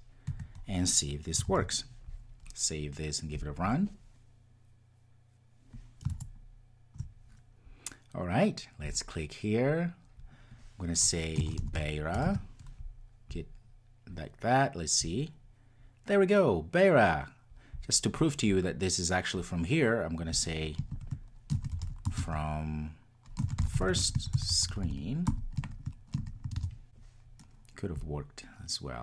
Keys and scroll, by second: 1.3 Return, 1.8 super+s, 3.3 ctrl+r, 26.8 ctrl+r.